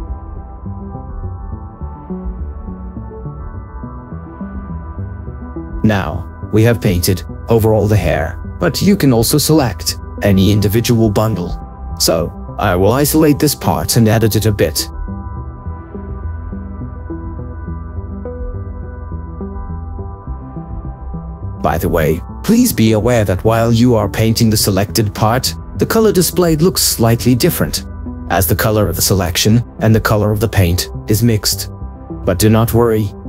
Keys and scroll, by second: 18.9 ctrl+z.